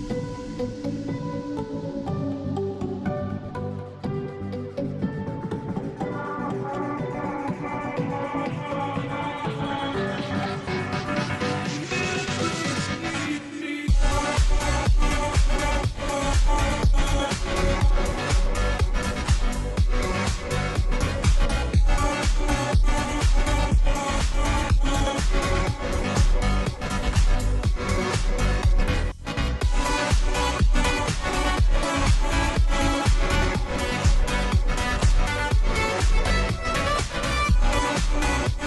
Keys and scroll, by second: 5.1 ], 5.5 ], 5.6 ], 8.1 ], 8.3 ], 10.5-15.4 typing, 17.4-19.1 typing, 20.4 [, 20.6 [, 21.8 ], 22.0 ], 33.9 ctrl+t.